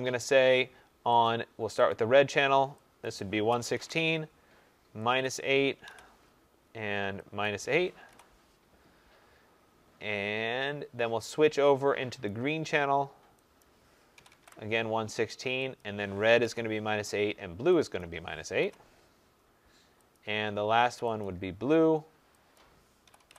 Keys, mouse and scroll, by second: 0.2 click, 1.2 click, 1.9 click, 3.0 click, 3.2-4.2 typing, 5.2 click, 5.5-6.3 typing, 7.4 click, 8.1 8, 11.3 click, 12.2 click, 12.3-14.9 typing, 13.6 click, 15.7 click, 16.0-16.8 typing, 17.9 click, 18.4 typing, 20.1 click, 21.1 click, 22.5 click, 23.0-23.3 typing.